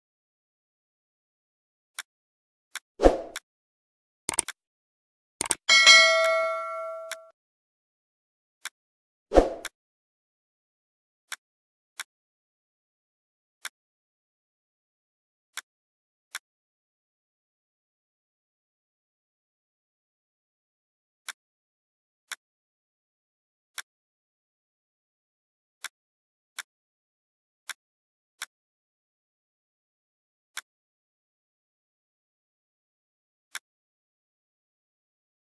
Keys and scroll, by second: 10.2 Delete, 19.6 shift+Page_Up.